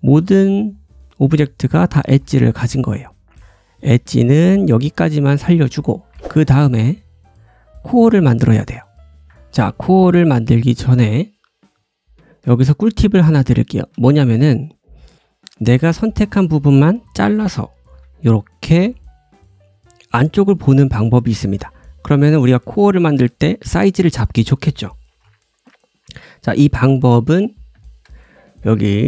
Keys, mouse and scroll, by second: 0.0-3.8 drag, 0.1-0.7 scroll up 1, 0.7 middle click, 0.9-1.9 scroll up 1, 2.0 ctrl+z, 2.4-3.1 scroll down 2, 3.2 scroll up 1, 3.4 shift+middle click, 3.4 scroll down 3, 3.4 `, 3.8-6.4 right drag, 4.5 scroll down 1, 4.8 shift+middle click, 5.9 g, 6.4-12.2 drag, 8.5 middle click, 8.5 right click, 9.2 right click, 10.6 middle click, 10.6 right click, 11.4 g, 12.4-15.1 drag, 13.0-13.4 scroll up 1, 13.5 shift+middle click, 17.8 alt+b, 19.5 middle click, 21.0 scroll up 1, 21.2 shift+middle click, 21.6-22.5 scroll up 1, 22.5-24.0 scroll up 1, 25.0 alt+b, 25.8-26.7 scroll down 1, 26.9 `, 27.3-27.9 scroll down 3, 27.9 shift+middle click.